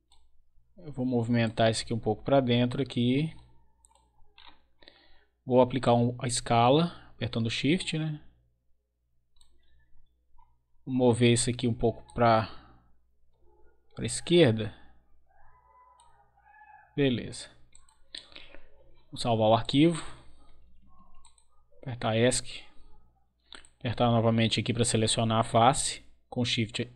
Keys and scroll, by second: 20.4 Escape.